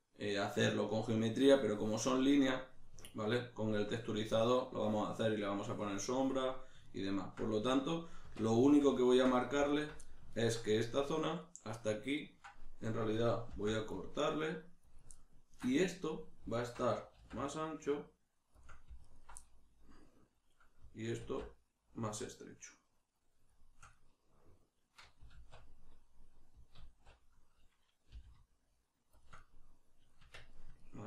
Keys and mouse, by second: 8.2 Tab, 9.7 alt+right click, 10.0-15.0 ctrl+middle drag, 13.5 ctrl+r, 15.0 click, 15.2-16.6 ctrl+middle drag, 16.6 alt+right click, 17.2 alt+s, 18.6 shift+click, 19.0 alt+right click, 19.4-23.6 middle drag, 21.2 alt+s, 23.6 shift+click, 23.9-29.2 middle drag, 25.4 alt+q, 29.2 shift+click, 30.2 Tab, 30.5 middle click.